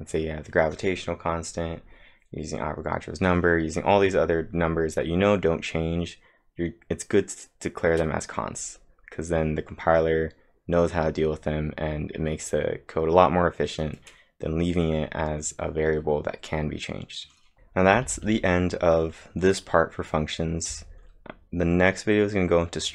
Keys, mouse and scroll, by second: 17.9 typing, 20.5-21.2 typing.